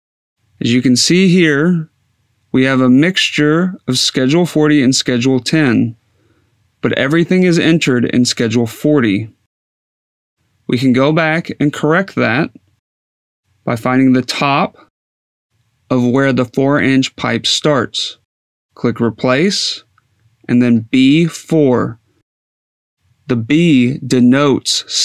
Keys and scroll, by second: 20.4 b, 21.1 4.